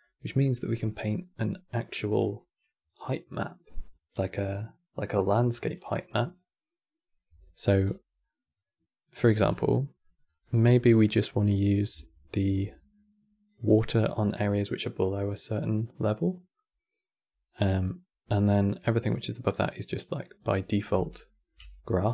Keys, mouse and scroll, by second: 7.0 n, 7.5 scroll down 4, 8.0-9.2 middle drag, 9.2 scroll down 8, 9.4 middle click, 10.0 scroll up 3, 10.1 middle click, 10.6-10.9 scroll up 3, 10.9-12.2 middle drag, 12.2 shift+scroll down 2, 12.4-13.2 middle drag, 13.2 click, 20.7 scroll down 3, 21.0 middle click, 21.3 g.